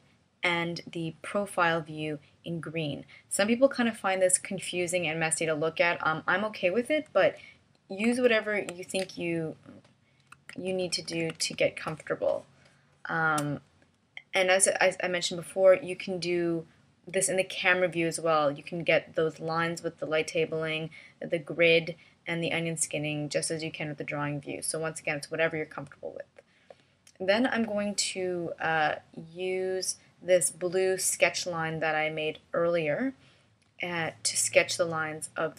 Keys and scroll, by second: 9.0 super+=, 11.4 super+=, 12.4 space, 34.6 space.